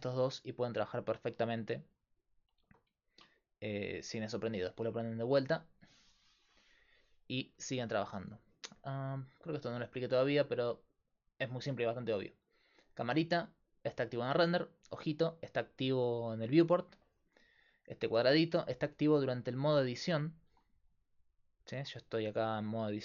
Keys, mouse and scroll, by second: 0.0 Tab, 1.2 s, 2.6 Tab, 6.2-10.7 drag, 16.8 click, 16.9-18.6 middle drag, 18.6-21.0 drag, 21.0-22.4 right drag, 21.8 Tab.